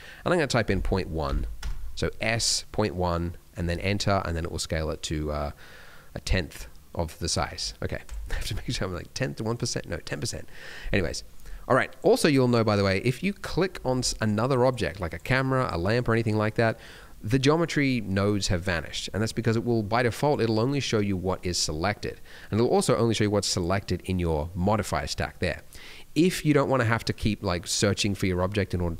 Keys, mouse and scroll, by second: 4.1 middle click, 8.1 click, 11.8 click, 12.2 click, 13.2 middle click, 13.5 scroll down 3, 14.0 middle click, 14.6 click, 15.0 click, 15.2 click, 15.5 click, 15.8 click, 20.2 click, 23.5 click, 25.1 click, 26.1 middle click, 26.3 scroll up 1, 26.8 click, 27.1 click, 28.0 click.